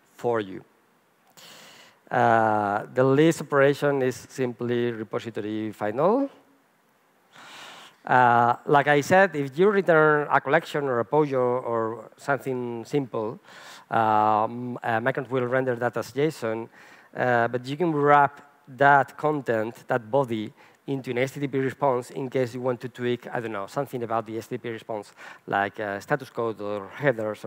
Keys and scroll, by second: 4.6 Return.